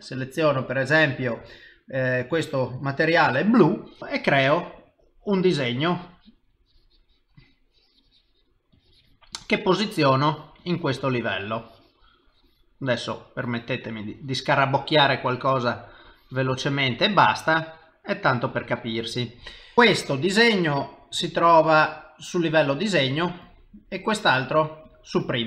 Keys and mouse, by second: 5.4 click, 6.4 click, 6.6 click, 7.6 click, 8.7 click, 9.3 click, 10.2 click, 10.6 click, 12.1 click, 12.9 click, 14.1 click, 15.2 click, 15.5 click, 16.1 click, 17.3 click, 17.6 click, 18.0 click, 21.1 click, 23.0 click, 23.4 click, 24.4 click, 24.9 click.